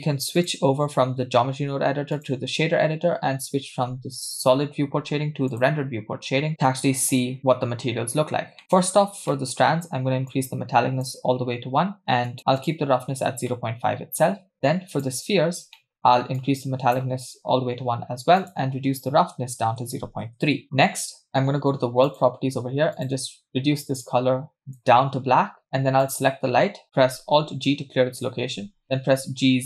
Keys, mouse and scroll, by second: 0.4-2.4 drag, 5.8 click, 7.6-8.6 scroll down 1, 8.6 scroll down 4, 8.6 middle drag, 8.9-10.2 scroll up 5, 9.3 middle click, 10.2 scroll up 1, 10.3-11.2 drag, 12.2 click, 13.2 scroll down 3, 13.5 middle click, 14.9 click, 15.7 middle click, 16.0-16.3 scroll up 3, 16.4-17.1 drag, 18.4-20.6 drag, 22.0 click, 22.9 click, 26.0 click, 27.3 alt+g, 28.6 g.